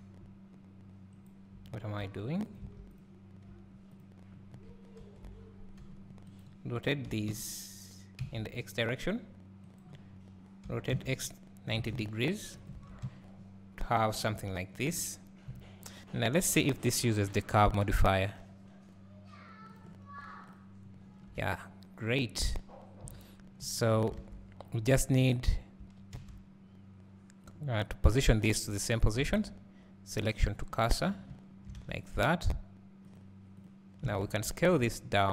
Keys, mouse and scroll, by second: 2.6 click, 2.9 x, 3.9 click, 5.1 ctrl+l, 5.9 g, 6.4 right click, 7.1 r, 12.7 Tab, 18.1-19.9 drag, 21.3 scroll down 1, 24.1 alt+a, 24.7 click, 28.9 click, 31.0 scroll down 1, 31.8 alt+a, 34.5 s.